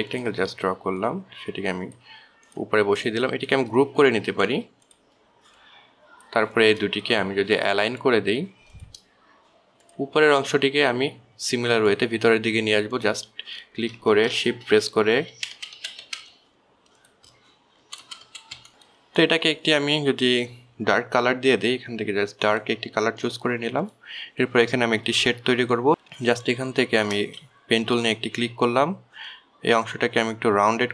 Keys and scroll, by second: 4.5 ctrl+g, 15.7 shift+Right, 16.1 shift+Right, 18.2 shift+Left, 18.4 shift+Left, 18.6 shift+Left, 28.8 ctrl+z.